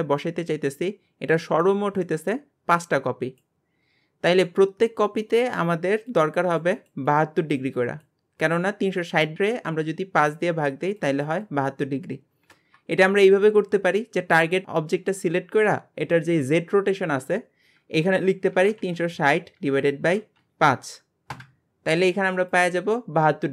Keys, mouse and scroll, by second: 16.2-19.3 drag.